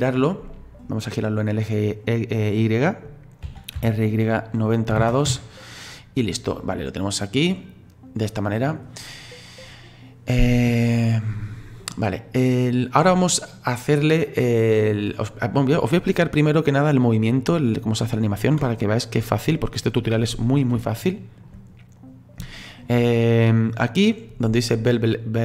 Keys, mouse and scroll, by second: 3.4 r, 6.7 click, 7.6-10.9 middle drag, 10.9-11.3 scroll up 4, 11.3-12.3 scroll down 2, 12.4-12.8 scroll down 3, 14.2-16.2 middle drag, 16.2-16.7 scroll up 2, 16.7-18.6 scroll down 2, 20.9 shift+middle click, 21.7-22.2 scroll up 1, 22.2-22.5 scroll down 1, 22.5-25.4 shift+middle drag.